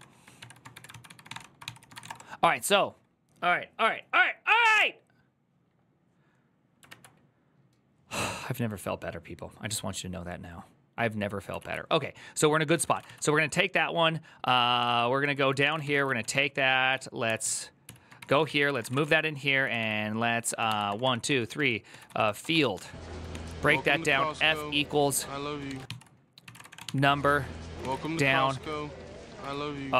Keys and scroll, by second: 0.0-2.2 typing, 6.7 alt++, 11.5 alt+{, 12.4-13.2 typing, 14.3-29.9 typing, 27.6 ctrl+c.